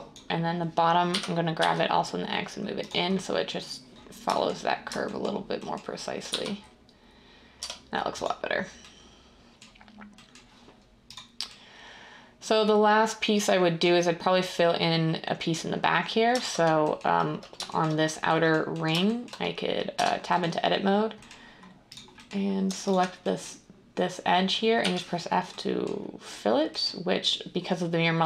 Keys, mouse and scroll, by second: 1.1-1.6 typing, 5.7-6.3 typing, 7.6 Tab, 16.3 Caps_Lock, 19.9 Tab, 24.8 f.